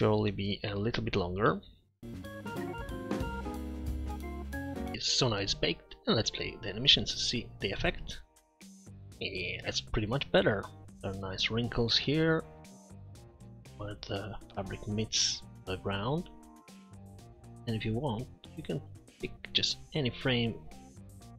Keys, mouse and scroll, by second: 1.6-2.0 middle drag, 7.4-8.2 drag, 12.4-13.7 middle drag, 14.9-15.7 middle drag, 18.2 middle drag, 18.6 middle click.